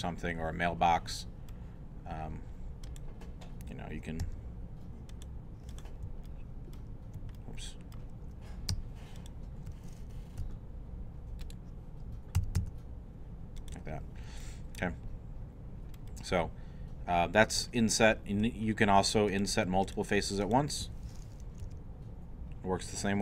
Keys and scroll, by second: 4.2 e, 10.4 shift+e, 12.2-13.1 typing, 21.6 shift+i.